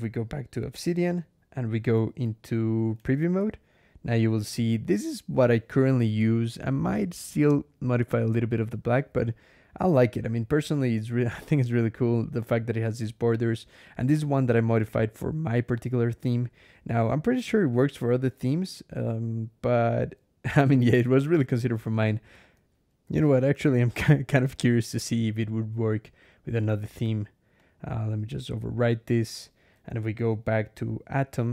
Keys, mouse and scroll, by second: 0.0 4, 1.0-1.4 scroll up 2, 2.6 ctrl+click, 2.9 ctrl+e, 3.2 ctrl+Escape, 18.5 scroll down 2, 18.8 scroll up 2, 22.5 alt+\, 24.3 ctrl+,, 26.5 click, 27.4 click, 28.9 click.